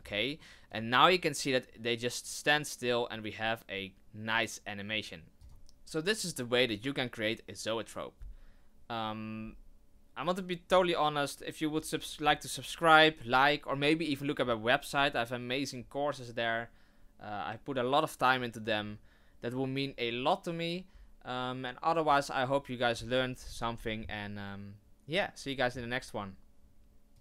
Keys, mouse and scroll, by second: 0.7 click, 5.4 click.